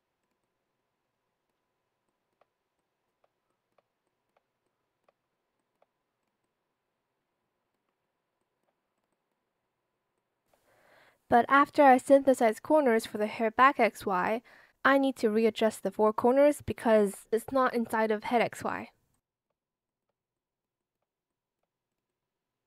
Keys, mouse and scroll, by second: 2.0 shift+click, 2.7 shift+click, 3.4 shift+click, 4.6 shift+click, 5.5 shift+click, 10.1 shift+click, 10.8 shift+click, 13.3 shift+click, 13.8 Return, 15.1 shift+click, 15.9 click, 17.0 shift+click, 18.6 shift+click, 19.1 shift+click, 19.8 shift+click, 20.3 shift+click, 21.2 shift+click.